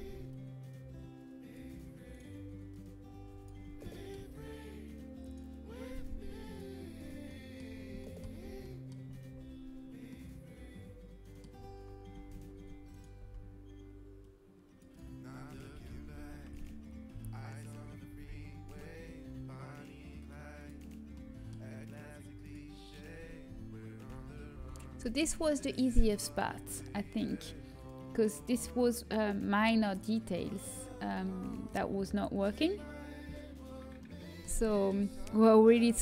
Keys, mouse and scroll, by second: 1.5-2.9 drag, 3.5 middle click, 5.1 right click, 6.7 middle click, 6.9 click, 8.3 a, 12.1 z, 12.8-19.2 drag, 13.1 z, 14.2 right click, 15.6 ctrl+z, 16.0 ctrl+z, 19.2 g, 20.7-22.3 drag, 22.3-23.5 middle drag, 23.5-24.9 right drag, 24.9 g, 25.4-28.2 middle drag, 34.7 middle click.